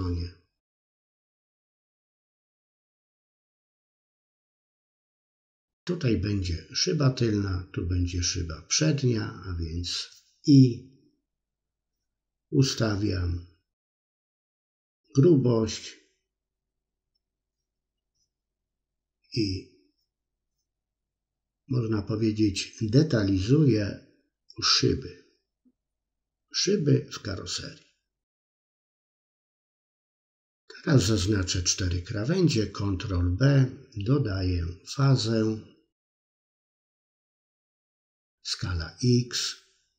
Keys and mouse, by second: 0.8 middle click, 1.3 middle click, 3.0 c, 4.1 middle click, 4.6 c, 5.3 middle click, 5.7 middle click, 7.3 c, 8.6 middle click, 9.6-11.5 drag, 11.6 middle click, 12.4 click, 12.5 middle click, 13.1 middle click, 13.4 click, 13.9 shift+click, 15.0 middle click, 15.4 middle click, 15.8-17.0 shift+drag, 17.4 i, 18.1-19.1 drag, 19.3 middle click, 19.9 middle click, 20.6 ctrl+z, 21.0 middle click, 21.7 i, 22.4-23.5 drag, 23.7 middle click, 24.2-25.5 middle drag, 25.7 middle click, 26.7 middle click, 29.6 alt+shift+click, 29.8 middle click, 30.2 alt+shift+click, 30.4 middle click, 30.9 middle click, 31.4 middle click, 32.0 ctrl+b, 33.1 middle click, 33.3 middle click, 34.3 click, 35.3 middle click, 35.9 middle click, 36.6 click, 37.4 middle click, 38.2 shift+click, 38.7 s, 39.7 shift+click.